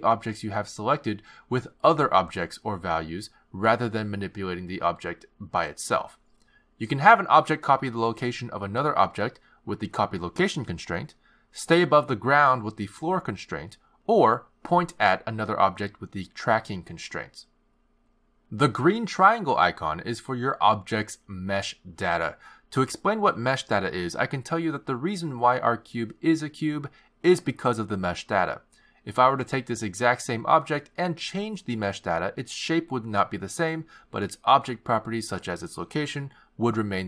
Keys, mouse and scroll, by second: 1.3 click, 3.3 click, 7.5 click, 8.0 click, 8.4 click, 9.2 click, 10.1 click, 14.1 click, 15.2 click, 15.7 click, 17.5 click, 19.3 click, 24.9 shift+a, 28.1 g, 30.0 click, 31.4 click, 35.1 click.